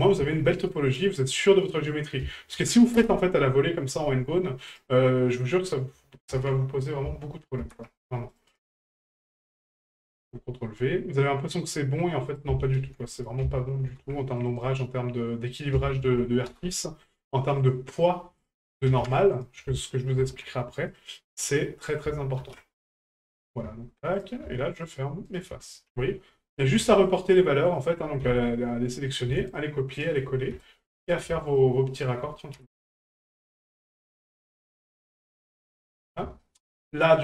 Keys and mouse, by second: 2.0-3.0 drag, 4.7 right click, 5.7-7.0 drag, 9.4 click, 11.4 right click, 12.3-13.3 ctrl+drag, 15.5-16.6 drag, 17.6 right click, 18.4-19.5 drag, 22.0 ctrl+click, 24.1 right click, 24.8 shift+right click, 25.3 shift+right click, 26.6 right click, 27.1 shift+right click, 27.7 shift+right click, 29.1 right click, 29.5 shift+right click, 30.0 shift+right click, 31.0 right click, 31.5 shift+right click, 32.0 shift+right click, 33.1 right click, 33.7 shift+right click, 34.1 shift+right click, 34.9 shift+right click, 36.0 middle click, 36.4 shift+middle drag.